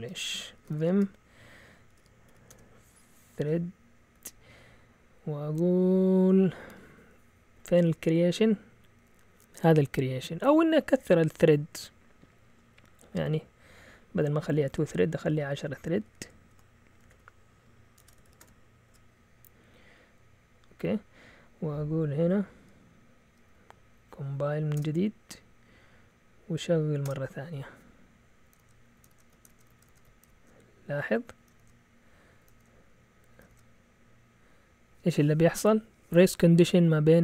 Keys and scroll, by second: 0.0-5.2 typing, 14.1-18.7 typing, 17.9 Escape, 18.8 Return, 21.1 Up, 21.5 Up, 23.5 Up, 24.1 Up, 24.7 Return, 25.7 Up, 25.9 Up, 26.4 Up, 27.0 Return, 28.4 Up, 28.5 Return, 29.0 Up, 29.0-33.4 typing, 29.4 Return, 29.7 Up, 32.4 Up, 33.4 Return.